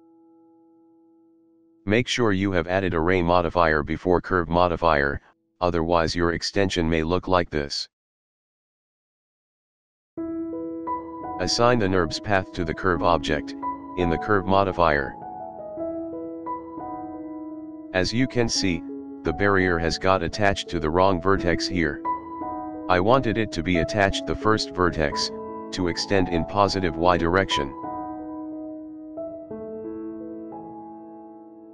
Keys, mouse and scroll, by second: 1.3-1.7 scroll down 3, 1.7-3.0 middle drag, 3.2-3.6 scroll down 3, 3.6-3.9 scroll up 3, 3.9 middle click, 4.4-5.1 scroll down 3, 6.1 click, 6.7-11.1 middle drag, 11.2 click, 11.9-12.4 scroll down 5, 13.0 click, 15.2-15.7 scroll down 3, 15.5-15.9 scroll up 3, 15.9-16.4 middle drag, 16.5 scroll down 2, 16.7 shift+middle drag, 17.1-17.4 scroll up 2, 17.4-17.9 middle drag, 18.0-18.4 shift+middle drag, 18.5-18.9 scroll down 2, 19.1-21.0 drag, 21.4-25.7 drag, 26.1 shift+middle drag, 26.4 middle click, 28.3-29.8 drag.